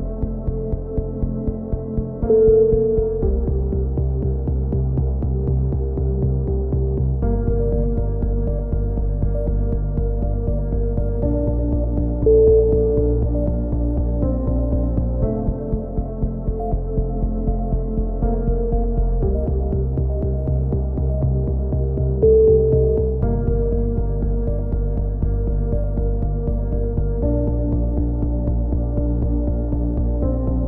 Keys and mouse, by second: 0.0 click, 0.4 x, 0.8 right click, 1.0 a, 1.1 a, 1.4 ctrl+n, 1.6 a, 2.9-7.0 drag, 6.7 KP_3, 7.1 z, 7.3 z, 7.5 click, 7.9-8.9 middle drag, 8.8 right click, 8.9 click, 9.6 right click, 10.4 f, 10.4 a, 10.6 click, 16.3 right click, 16.6 click, 17.2 right click, 17.6 f, 17.6 a, 18.8 KP_3, 19.4 z, 19.6 z, 19.7 click, 20.8 click, 21.4 middle click, 21.4 right click, 22.0 click, 22.0 middle click, 22.9 right click, 22.9 f, 23.1 a, 23.6 click, 24.3-25.9 right drag, 24.5 click, 25.3 f, 25.4 a, 25.9-29.9 drag, 29.9-30.6 right drag.